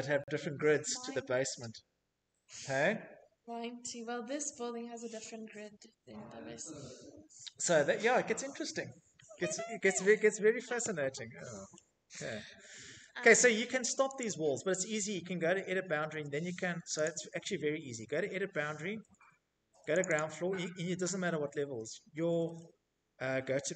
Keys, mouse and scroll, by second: 9.1 Escape, 9.6-10.0 scroll, 10.9-11.8 scroll, 12.2 Escape, 12.2-12.5 scroll, 12.8 right click, 13.2 middle click, 15.6 click, 15.6 right click, 16.7 scroll, 18.2 click, 18.6 click, 18.7 click, 19.7-21.2 scroll, 23.6 click.